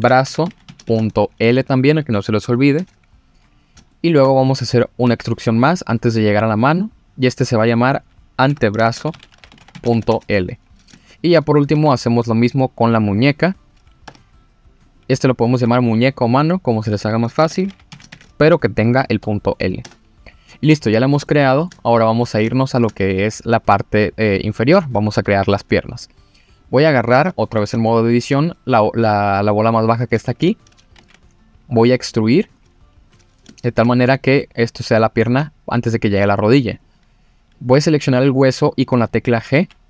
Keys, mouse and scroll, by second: 3.5 scroll up 2, 3.9 shift+middle click, 4.5 click, 5.0 e, 6.7 click, 7.3 click, 7.8 click, 8.5 F2, 10.9 shift+middle click, 11.6 click, 11.7 e, 13.4 click, 14.0 F2, 15.3 click, 15.5 F2, 20.4-21.2 scroll down 4, 21.2 shift+middle click, 22.1 scroll up 3, 22.5 shift+middle click, 26.0 click, 26.6 click, 27.3-27.7 scroll up 3, 27.8 shift+middle click, 29.8-30.6 scroll down 3, 30.9 e, 31.0 z, 32.4 click, 33.0 scroll up 2, 33.5 shift+middle click, 35.4 scroll up 1, 36.7 click, 39.5 g.